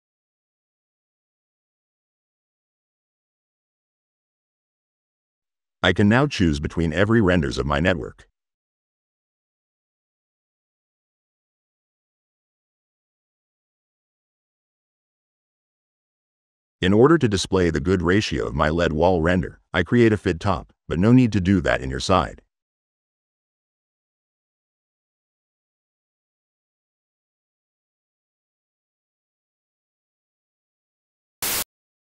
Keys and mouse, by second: 1.8-2.8 drag, 2.9-3.4 drag, 4.2 click, 4.5 middle click, 4.7 click, 4.9 middle click, 5.7 click, 6.2-8.2 drag, 8.4 right click, 9.0 click, 9.0 right click, 10.1-11.8 drag, 13.8 click, 16.6 click, 17.8 middle click, 18.5 right click, 19.9 i, 20.9 click, 21.6 click, 22.0 click, 22.3 click, 23.2 click, 26.5 click, 27.5 click, 28.3 click, 29.0 click, 29.4 click, 30.5 middle click, 31.3 click.